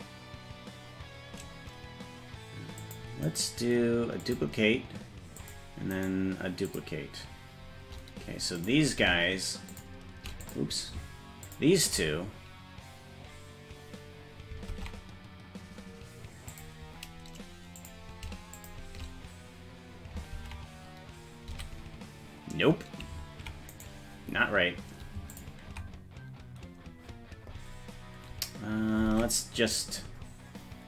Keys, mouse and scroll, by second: 2.8 click, 3.2-4.4 right drag, 5.4 click, 5.9 right click, 8.5 click, 9.7 shift+click, 10.4 click, 11.4 ctrl+click, 14.7 ctrl+Tab, 16.5 click, 17.8 click, 18.5 shift+click, 20.4 ctrl+Tab, 21.5 a, 23.8-25.1 right drag, 25.3 ctrl+click, 29.1 ctrl+Tab, 30.0-30.7 scroll down 3.